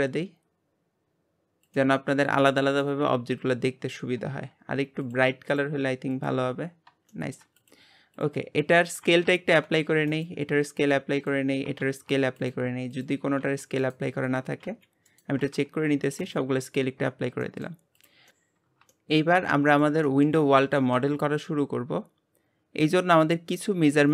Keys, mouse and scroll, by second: 2.7 scroll up 1, 2.8-5.0 middle drag, 5.0-7.1 drag, 7.1 shift+middle click, 7.6 click, 8.1 click, 9.2 ctrl+a, 11.1 click, 11.8 ctrl+a, 12.9 click, 13.4 g, 14.2 click, 14.6 g, 15.5 ctrl+a, 17.4 middle click, 18.0 click, 18.9-19.7 shift+middle drag, 19.7 click, 20.0-20.5 middle drag, 20.5 scroll up 1, 20.8-21.3 shift+middle drag, 21.3-22.7 scroll up 1, 22.7-23.3 scroll up 1, 23.3-24.1 scroll up 1.